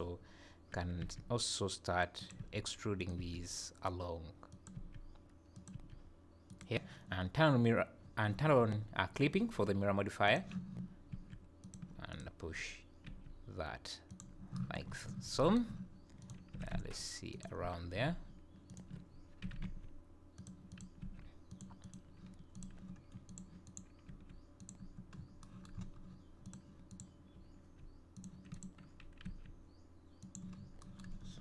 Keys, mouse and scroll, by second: 1.0 e, 2.3 e, 3.1 e, 4.7 e, 5.7 e, 10.3 click, 11.1 e, 12.1 click, 13.1 g, 14.9 scroll up 6, 16.2 click, 16.7 g, 18.7 ctrl+click, 19.4 g, 20.7 click, 21.0 g, 21.8 click, 22.5 click, 23.3 click, 23.7 click, 24.1 g, 25.2 scroll down 5, 25.8 scroll up 5, 26.5 click, 26.9 click, 27.6 g, 28.5 click, 29.2 g, 30.6 scroll down 3, 31.2-31.4 scroll up 4.